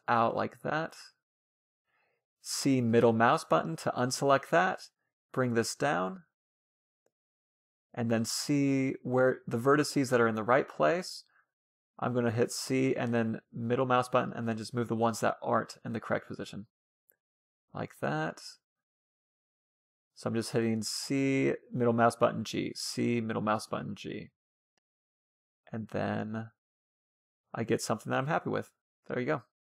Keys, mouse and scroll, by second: 1.5 c, 3.4-4.9 right drag, 3.9 g, 7.4-11.9 middle drag, 8.5 g, 11.4 c, 13.2-14.7 right drag, 13.5 g, 15.0 c, 16.2-17.7 right drag, 16.3 g, 17.3 c, 18.0-19.7 right drag, 18.2 g, 19.3-21.0 middle drag, 19.7 c, 20.5 g, 21.2 c, 21.7-23.0 right drag, 21.9 g, 24.1-25.9 middle drag, 24.7 c, 25.9-27.4 right drag, 26.2 g, 27.7 a, 27.9 c, 28.5-29.7 middle drag.